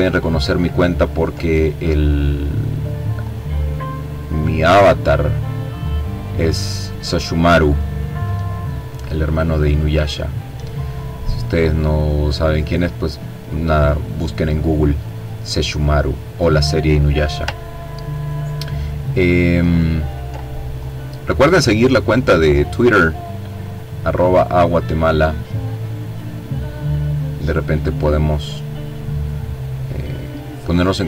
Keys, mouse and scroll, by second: 3.1-4.7 drag, 5.1 middle click, 5.5 click, 6.3-8.6 drag, 8.7-12.4 drag, 12.8-14.2 drag, 15.0-15.4 ctrl+scroll down 2, 15.5-16.5 ctrl+drag, 16.5-17.0 ctrl+scroll up 1, 18.0 click, 19.2-20.7 drag, 20.9-22.2 drag, 22.4-23.9 drag, 25.2-27.0 drag, 28.4 click, 30.3-31.0 drag.